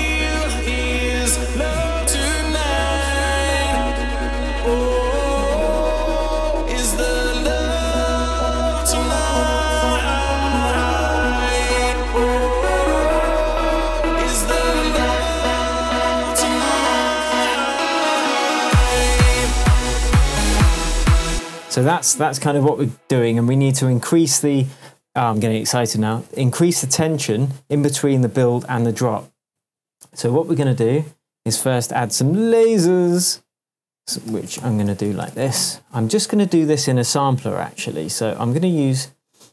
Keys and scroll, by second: 21.3 space, 26.3 super+s, 33.0 shift+super+t, 34.3 super+r, 34.6 shift+super+l, 34.6-35.9 typing.